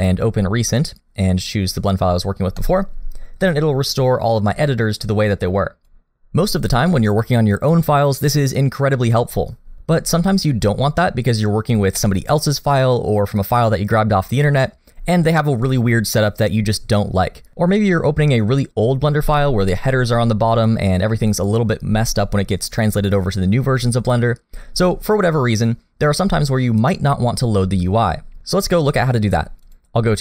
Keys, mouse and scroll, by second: 5.3 click, 19.4 middle click, 29.6 click.